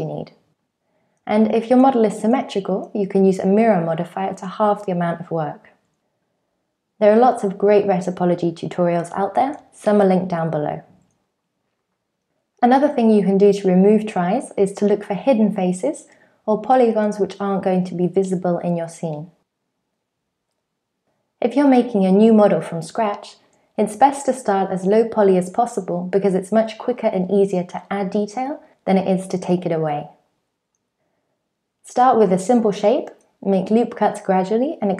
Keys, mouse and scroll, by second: 0.0-3.8 typing, 0.6 click, 0.7 click, 1.0 click, 1.4 alt+z, 1.4 click, 1.5 middle click, 1.8 alt+z, 1.8 click, 1.8 click, 2.0 click, 2.0 middle click, 2.2 click, 2.4 middle click, 2.4 click, 2.5 middle click, 2.6 click, 2.8 middle click, 3.0 click, 3.0 middle click, 3.4 middle click, 3.6 middle click, 3.6 scroll up 1, 3.9 Tab, 4.3 ctrl+a, 5.2 click, 6.9 click, 7.0 Tab, 7.1 alt+z, 7.1 middle click, 7.2 click, 7.3-11.3 typing, 8.0 super+z, 8.0 click, 8.2 middle click, 8.6 middle click, 9.1 middle click, 10.0 shift+middle click, 10.1 middle click, 10.1 scroll up 5, 10.5 scroll down 5, 10.6 shift+middle click, 10.8 middle click, 10.8 click, 11.0 shift+click, 11.2 middle click, 11.6 super+z, 11.6 shift+middle click, 11.7 middle click, 11.7 scroll up 2, 12.0 click, 12.1 middle click, 13.1 click, 13.2 shift+middle click, 13.6 KP_1, 13.8 Tab, 13.8 shift+middle click, 14.0 scroll up 4, 14.2 alt+z, 14.4 3, 14.7 click, 15.0 middle click, 15.0 scroll up 1, 15.2 x, 15.6 scroll down 5, 15.7 middle click, 15.9 alt+z, 16.0 click, 16.1 Tab, 16.2 scroll down 1, 16.2 click, 16.4 click, 16.5-19.8 typing, 16.7 Tab, 16.8 scroll up 3, 16.9 alt+z, 17.0 click, 17.7 Tab, 17.8 click, 17.9 Tab, 18.3 click, 18.5 middle click, 18.8 shift+click, 19.2 Tab, 19.2 middle click, 19.3 scroll down 5, 19.4 shift+middle click, 19.6 click, 19.9 Tab, 20.0 scroll up 3, 20.1 click, 20.4 shift+middle click, 20.6 Tab, 20.6 click, 20.7 Tab, 20.8 click, 21.0 x.